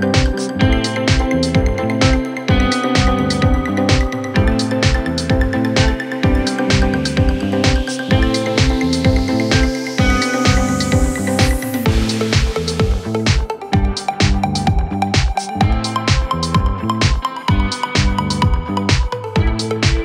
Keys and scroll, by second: 0.1 3, 1.5 Delete, 18.3 Delete.